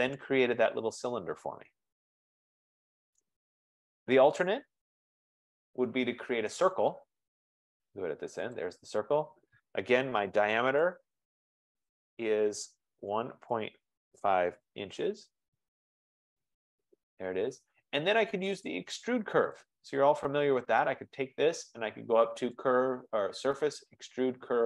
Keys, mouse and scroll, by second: 1.4 middle click, 3.2 F15, 3.2 scroll, 3.3 right click, 3.8 scroll, 4.7 middle click, 4.9 scroll, 6.8 click, 8.8 click, 10.4 typing, 11.1 Return, 13.0-14.8 typing, 14.9 Return, 16.2 Return, 18.8 click, 19.6 click, 20.9 click, 22.6 click.